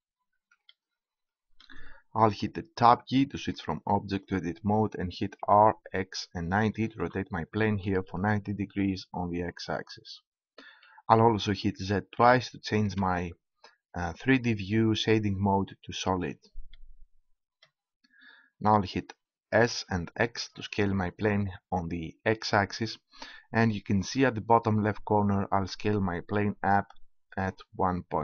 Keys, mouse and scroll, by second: 3.0 Tab, 5.4 r, 13.0 z, 18.7 middle click, 19.5 s.